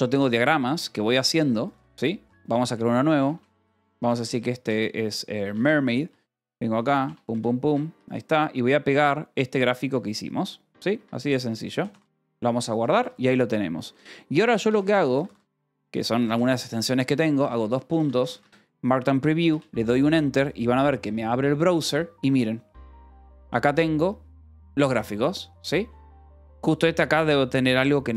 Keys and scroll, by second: 0.5 k, 0.8 j, 2.2 o, 2.6 Return, 3.7-6.0 typing, 6.0 Return, 7.2 space, 7.6 Escape, 7.9 k, 8.5 p, 9.5 u, 10.7 o, 10.9 Escape, 11.2 p, 12.3 j, 14.2 k, 14.8 j, 15.5 d, 15.8 Escape, 16.8 ctrl+s, 16.9-18.6 typing, 19.4 Return.